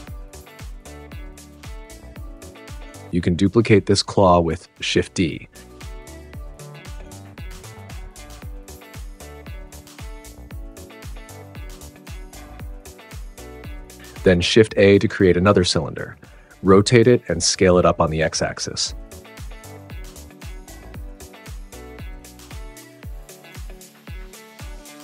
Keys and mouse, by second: 0.0-1.3 typing, 0.0 click, 0.3 click, 0.8 click, 1.5 Tab, 1.5 Tab, 3.2 right click, 4.3-9.1 typing, 5.3 super+z, 5.8 click, 6.4 click, 6.4 super+z, 6.5 click, 7.2 click, 8.3 click, 8.7 drag, 8.9 click, 9.4 click, 10.2 right click, 10.5 right click, 11.2-13.3 typing, 12.8 click, 13.1 click, 13.6 click, 13.9 click, 14.0 ctrl+p, 14.0 Tab, 14.4 shift+a, 16.1 super+z, 16.1-21.2 typing, 16.9 click, 17.5 click, 18.2 click, 18.8 click, 20.5 click, 21.0 click, 21.4 click, 22.1 click, 22.4 s, 22.7 g, 23.1 click, 23.2 s, 23.5 click, 24.3 g, 24.4 x, 24.7 click, 24.8 super+s.